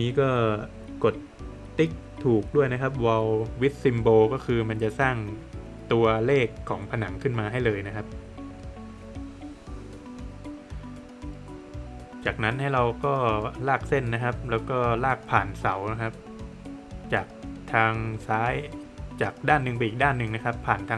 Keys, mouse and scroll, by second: 2.6 click, 5.1 scroll up 2, 5.9 middle click, 6.6 scroll up 1, 10.0 scroll up 1, 11.2 click, 11.4 scroll down 1, 12.9 scroll down 1, 13.0 click, 15.2 middle click, 15.7 scroll up 1, 17.3 scroll up 1, 17.4 click, 17.6 scroll down 1, 17.9 middle click, 18.3 scroll down 1, 18.5 middle click, 19.8 click.